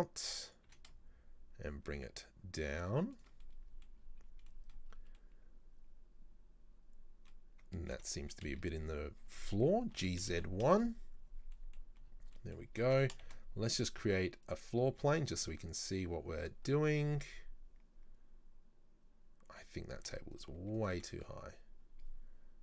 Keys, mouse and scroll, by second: 3.5 middle click, 4.0-4.6 scroll down 5, 4.6 middle click, 4.9-5.2 scroll up 1, 5.2-7.8 middle drag, 7.8-8.2 scroll down 1, 8.5 a, 10.0 g, 11.6 middle click, 11.8-12.4 scroll down 5, 12.4 middle click, 13.0 Tab, 13.3 shift+a, 14.9 s, 16.8 middle drag, 17.1 scroll up 2, 19.8 scroll up 2, 20.1 Tab, 20.4 right click, 20.6 Tab, 20.8 right click, 21.0 Tab, 21.8 scroll up 2.